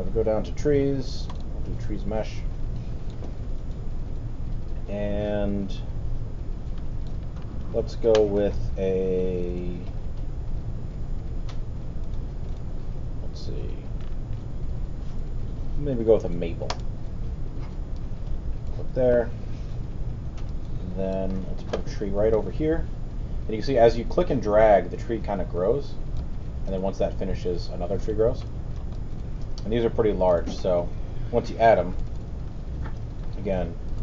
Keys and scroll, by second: 32.0 alt+r.